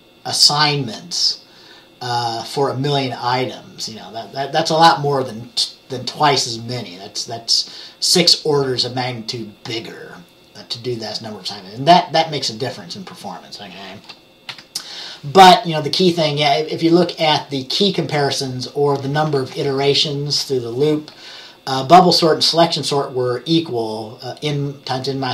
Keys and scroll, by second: 14.6 Page_Down.